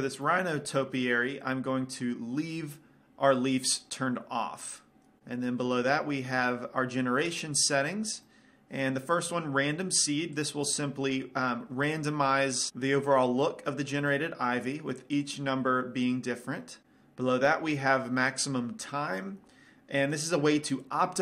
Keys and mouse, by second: 0.4-3.0 middle drag, 6.6-10.5 middle drag, 10.5-12.1 drag, 12.1 middle click, 14.2-16.8 drag.